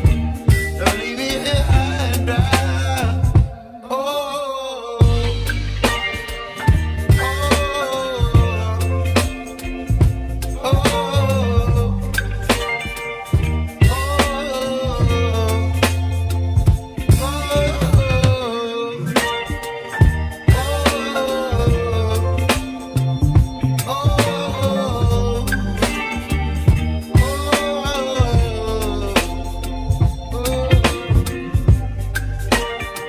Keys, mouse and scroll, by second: 1.9 Tab, 2.3 click, 3.4 Tab, 5.1 g, 10.3 Tab, 10.8 Tab, 11.7 g, 14.1 Tab, 14.8-16.2 middle drag, 16.2 click, 17.5-18.1 scroll up 5, 18.2-19.2 scroll up 2, 19.2 1, 21.4-22.4 scroll down 2, 22.4 click, 29.9 g, 31.4 click.